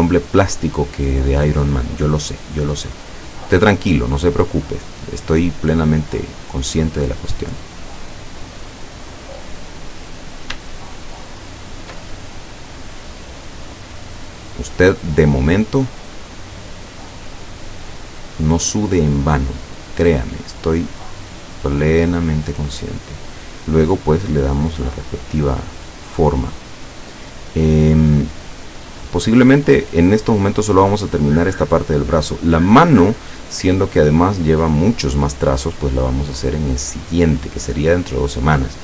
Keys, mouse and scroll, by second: 1.3 click, 3.6 click, 4.3 click, 4.8 click, 6.3 click, 7.9-9.1 drag, 9.8 click, 10.2 click, 11.6 shift+click, 12.2-16.0 shift+drag, 18.0 click, 19.8-22.3 drag, 26.8 click, 28.7-32.9 drag, 36.1 click, 37.7-38.8 drag.